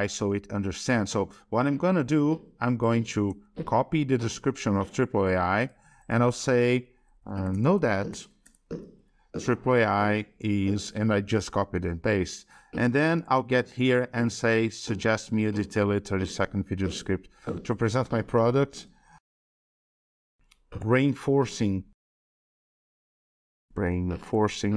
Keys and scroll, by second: 0.2 alt+Tab, 3.1 ctrl+c, 4.2 alt+Tab, 8.7 ctrl+v, 12.8 shift+Right.